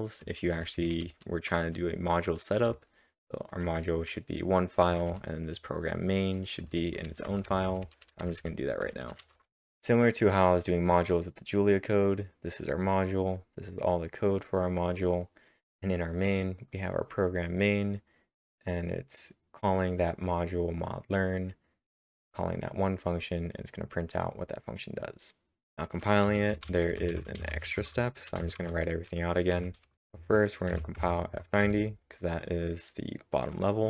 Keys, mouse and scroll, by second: 6.3-9.3 typing, 12.2 click, 12.2-12.9 scroll up 1, 12.9-13.5 scroll down 2, 17.0-19.1 drag, 19.1-22.3 drag, 23.0 click, 23.1-25.6 drag, 25.6-27.8 drag, 26.0-30.7 typing, 30.9 Tab, 31.6 Return.